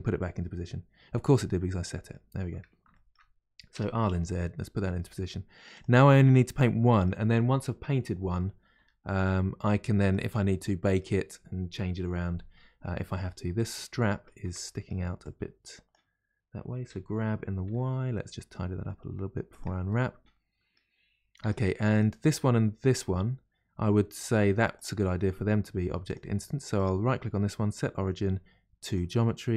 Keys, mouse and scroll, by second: 1.7-2.4 middle drag, 2.4-2.8 scroll up 2, 2.9 shift+middle click, 3.7 r, 6.0-8.8 middle drag, 8.8 r, 10.5-12.6 middle drag, 12.6-12.9 scroll down 1, 12.9-13.6 middle drag, 13.6 click, 14.0 middle click, 14.5 Tab, 14.6 middle click, 15.2 click, 15.3 middle click, 15.9 click, 16.9 g, 17.0 g, 19.9-21.4 middle drag, 21.4 Tab, 21.9 click, 22.9 click, 24.8 click, 26.1 click, 26.8-29.5 right drag.